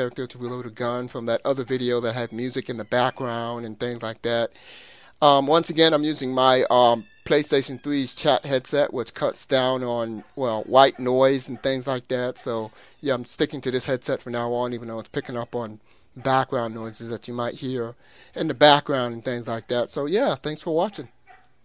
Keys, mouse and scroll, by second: 5.9-8.0 middle drag, 11.9-13.7 middle drag.